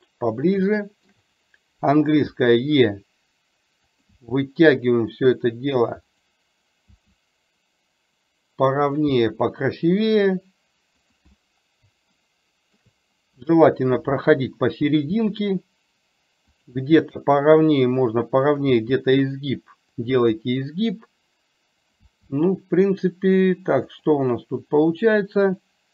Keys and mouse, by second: 0.7 shift+middle click, 12.2 shift+middle click.